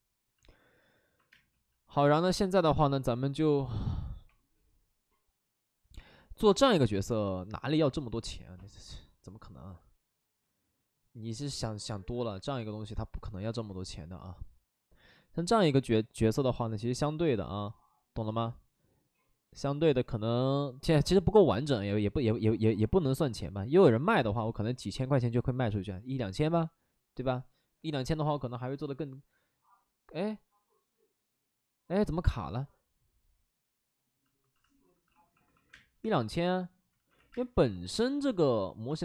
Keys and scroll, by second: 1.3 space, 34.3 alt+s, 35.0 shift+d, 35.4 shift+d, 35.6 space, 35.9 3, 36.9 ctrl+z, 37.1 x, 37.3 space, 37.9 space.